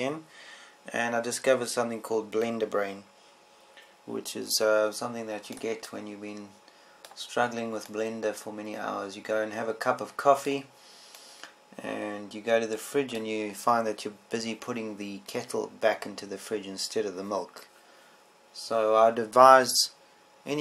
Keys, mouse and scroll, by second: 0.3 KP_0, 7.3 middle click, 8.5-9.6 middle drag.